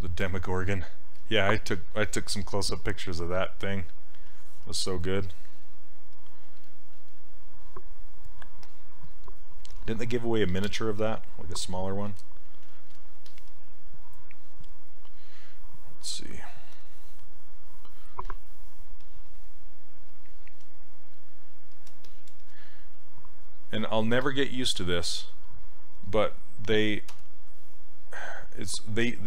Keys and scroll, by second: 27.1 w.